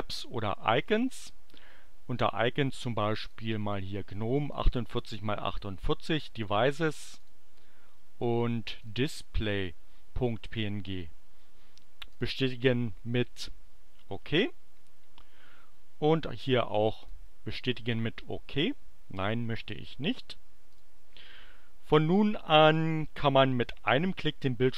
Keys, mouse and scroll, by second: 0.7 click, 3.1 click, 4.4 click, 6.3 click, 7.0 click, 8.8 click, 12.1 click, 17.0 click, 20.7 click.